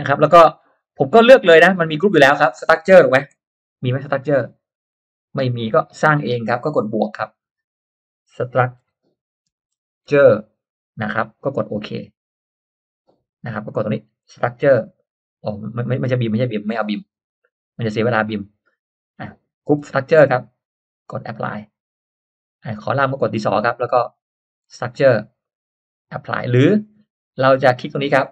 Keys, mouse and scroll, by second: 2.3 click, 3.3 s, 6.0 click, 6.7 click, 7.8 s, 8.5 t, 9.8-11.0 typing, 12.2 click, 13.8 click, 14.6 s, 15.4 click, 17.9 click, 19.2 click, 19.7 s, 20.7 click, 21.6-22.5 drag, 23.0 click, 24.3 click, 24.7 s, 25.4 click, 26.0 click, 27.4 click, 28.1 right click.